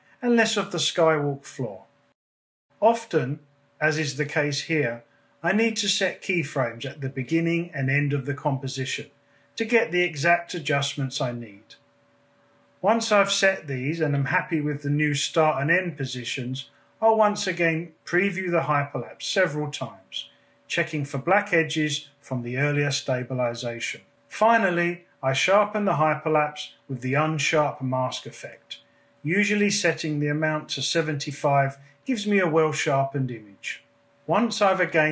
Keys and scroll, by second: 8.3 p, 12.3 Down, 15.4 space, 22.7 space, 24.7-26.0 typing, 28.2-29.1 typing, 31.0 super+s, 31.3 space.